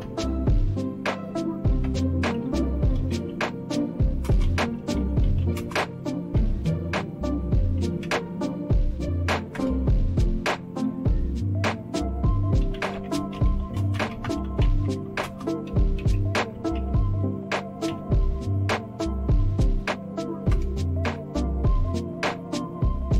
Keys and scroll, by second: 0.0-0.5 typing, 1.6-10.0 typing, 12.4-17.9 typing, 20.3-21.0 typing.